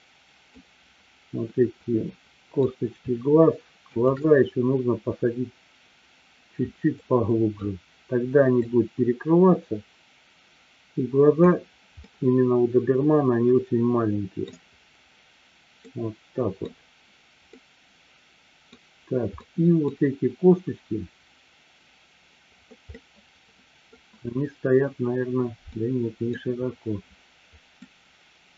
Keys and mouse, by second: 0.4-2.6 middle drag, 3.8 shift+click, 6.9-7.7 middle drag, 9.1-11.8 drag, 12.1-14.6 middle drag, 15.8 middle click, 17.6-18.8 middle drag, 19.3-19.9 middle drag, 22.8-23.8 middle drag, 25.8-26.3 middle drag, 27.9 middle click.